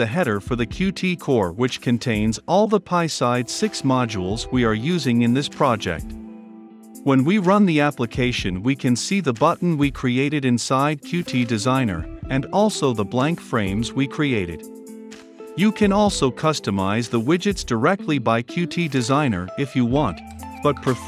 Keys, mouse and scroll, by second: 0.4-1.6 typing, 2.7-5.2 typing, 3.8 Return, 4.9 Return, 5.9 ctrl+8, 5.9 ctrl+F5, 8.0-13.6 drag, 13.6-15.9 middle drag, 15.9 click, 16.1-19.1 typing, 19.7 Return, 20.8-21.0 drag.